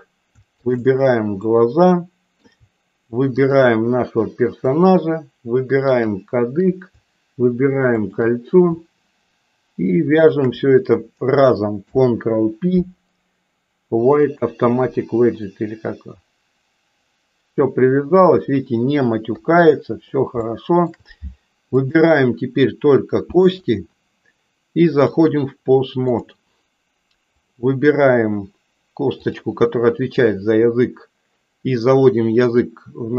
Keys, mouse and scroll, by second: 0.5 shift+click, 1.4-2.5 middle drag, 3.4 shift+click, 5.9 shift+click, 7.9 shift+click, 11.9 ctrl+p, 19.2 KP_3, 20.5 shift+middle click, 21.6 click, 25.0-26.4 drag, 30.1 click, 30.4-33.1 drag.